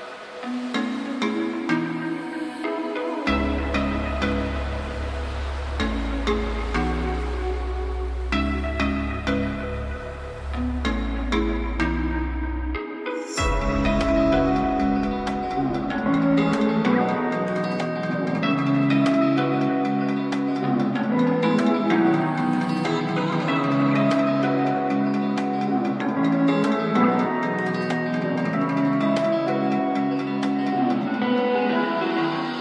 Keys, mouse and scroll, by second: 29.5-31.2 alt+drag.